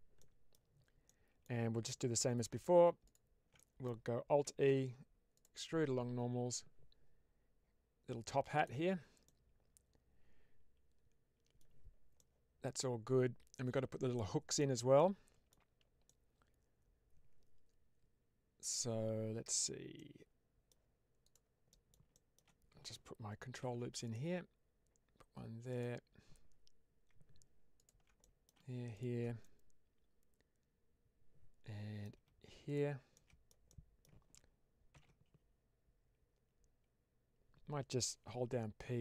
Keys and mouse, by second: 0.1 middle click, 0.9 middle click, 2.3 3, 3.4 middle click, 4.5 alt+e, 8.4 click, 9.1-11.6 middle drag, 12.0-14.5 middle drag, 14.8 middle click, 15.9-19.4 middle drag, 19.9 middle click, 21.6 middle click, 22.2 shift+middle click, 23.5 ctrl+r, 25.6 click, 27.7 alt+click, 28.1 middle click, 29.3-31.9 middle drag, 32.6 alt+shift+click, 33.0 alt+shift+middle click, 33.6 middle click, 34.8 ctrl+b, 38.9-39.0 p.